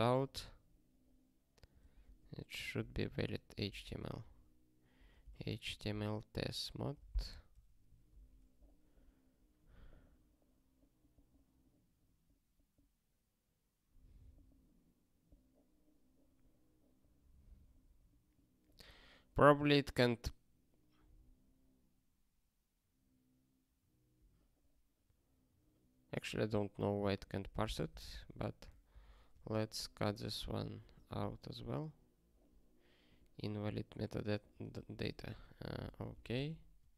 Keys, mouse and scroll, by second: 29.9 super+o, 31.3 ctrl+k, 33.3 q, 36.1 super+o, 36.8 ctrl+k.